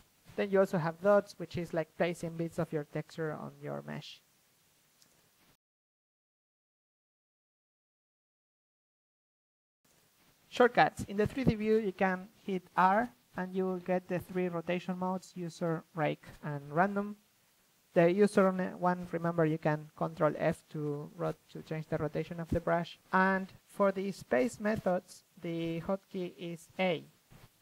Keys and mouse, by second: 0.6 ctrl+z, 1.0 shift+f, 1.6-3.1 drag, 3.6-6.3 drag, 4.3 ctrl+f, 6.9-8.1 drag, 8.1 middle click, 8.8 ctrl+z, 8.8 drag, 9.1-10.3 drag, 10.7 ctrl+z, 11.1-12.1 drag, 12.5 ctrl+f, 12.8 click, 13.6-16.2 drag, 16.3 click, 17.1 r, 20.0 a.